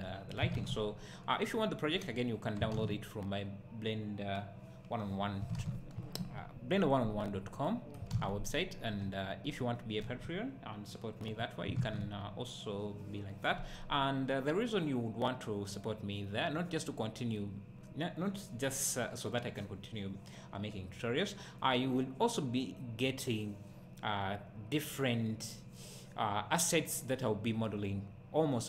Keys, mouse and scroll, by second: 9.0 `.